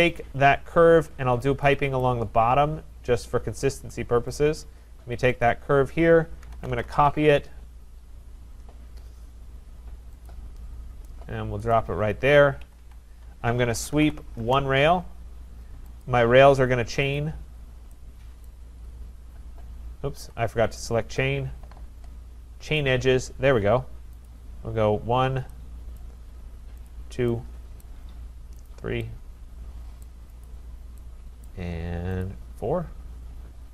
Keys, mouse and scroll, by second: 0.5-1.7 scroll, 0.9 Escape, 1.7 scroll, 2.0 right click, 2.3-3.9 scroll, 4.4 click, 5.4 click, 6.2-7.5 typing, 10.3 click, 11.7 click, 12.6 Escape, 12.8 Escape, 13.4-14.5 typing, 16.1 click, 17.2 click, 17.6-18.1 scroll, 18.5 right click, 18.8-19.5 scroll, 20.2 Escape, 20.4 scroll down 4, 20.9 right click, 22.8 click, 24.3 click, 26.0 right click, 26.9 click, 27.8 right click, 28.7 click, 30.0 right click, 30.5 click, 31.9 right click, 32.2 click, 33.2-33.7 middle click, 33.2 middle click.